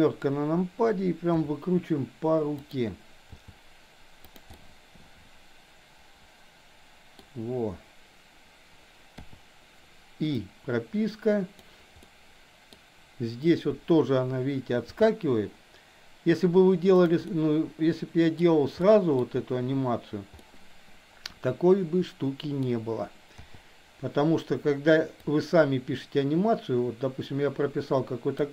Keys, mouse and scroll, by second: 1.3 r, 3.3 g, 4.6-7.2 middle drag, 7.2 scroll down 1, 9.2 i, 10.3-11.7 drag, 11.9-12.7 middle drag, 14.9 g, 17.3-18.4 middle drag, 17.3 scroll up 1, 18.3 scroll down 1, 18.8-19.2 middle drag, 20.4 middle click, 20.6-22.6 middle drag, 23.4 i, 25.3-28.5 drag.